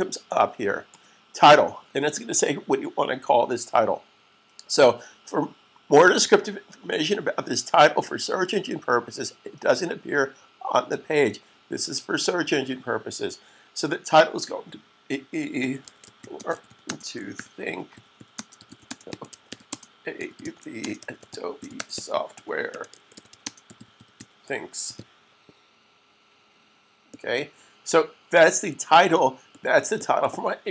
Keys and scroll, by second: 15.2-18.4 typing, 19.8-23.6 typing, 24.7-25.4 typing.